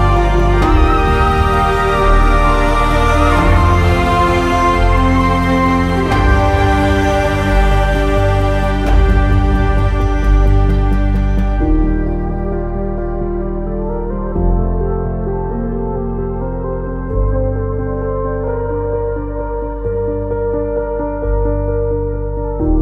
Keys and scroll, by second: 15.0 ctrl+z.